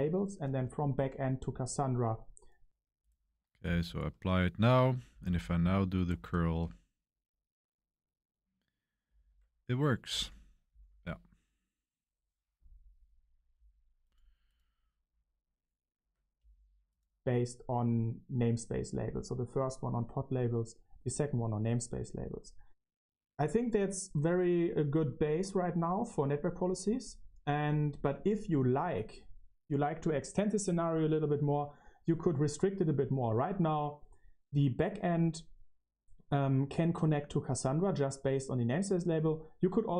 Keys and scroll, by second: 0.0-0.8 typing, 2.9 typing, 3.5 Return, 5.1 Page_Up, 5.3 Page_Up, 5.5 Page_Up, 6.0 Up, 6.0 Down, 6.5 Return, 7.6 Page_Down, 9.0 Page_Up, 10.0 Return, 15.9 ↺, 16.4 ↺.